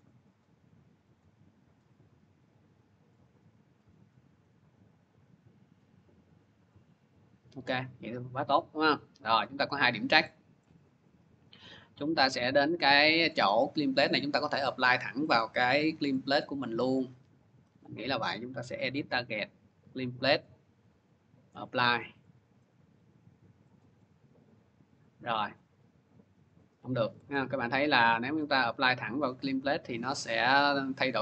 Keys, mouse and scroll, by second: 1.0 click, 9.2 click, 9.5 scroll, 10.5-12.2 scroll, 12.6 scroll, 13.1 middle click, 15.1 click, 18.7 click, 20.5 click, 21.5 click, 22.2 middle click, 22.5 middle click, 23.6 click, 23.6 click, 25.4 click, 27.4 ctrl+z, 29.8 ctrl+z, 31.1 click.